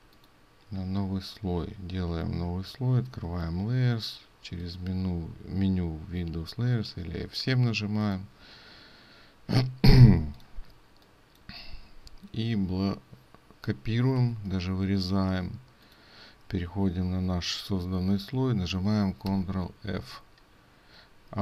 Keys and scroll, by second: 10.1 ctrl+space, 14.2 ctrl+x, 19.3 ctrl+f.